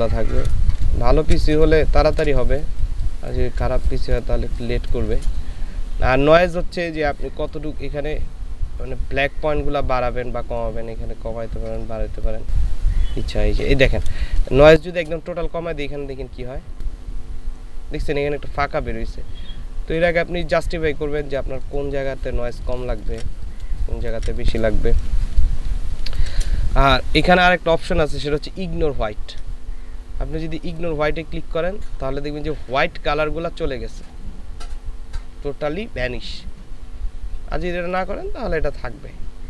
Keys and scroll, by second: 0.9 ctrl+alt+space, 1.8 ctrl+alt+space, 2.8 ctrl+alt+space, 14.4 ctrl+space, 23.9 ctrl+space.